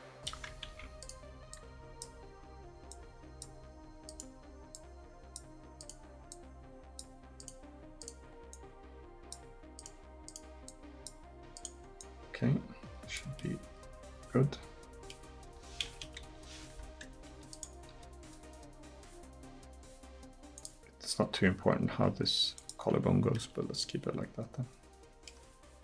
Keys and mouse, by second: 0.7 ctrl+z, 13.4 middle click, 16.0 KP_1, 17.9 g, 21.3-23.4 drag, 21.9 g.